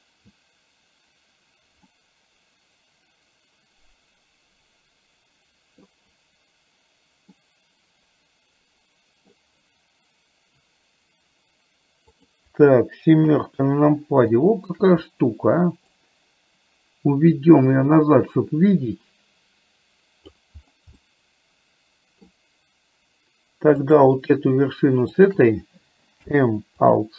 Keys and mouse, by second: 2.1-5.9 middle drag, 7.5-9.4 middle drag, 12.1 click, 13.4 KP_7, 14.4 shift+middle click, 16.1-20.4 drag, 23.9 click, 25.2 shift+click, 26.4 m.